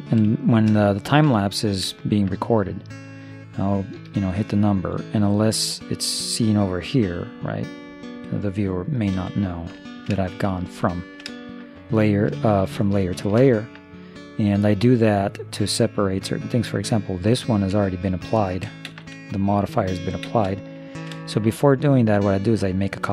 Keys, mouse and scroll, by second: 4.1 0, 7.1 1, 8.2 0, 9.2 1, 12.6 shift+space, 16.9-18.4 right drag, 17.5-19.8 middle drag, 18.9 shift+space, 20.3 shift+space, 20.9-22.6 middle drag.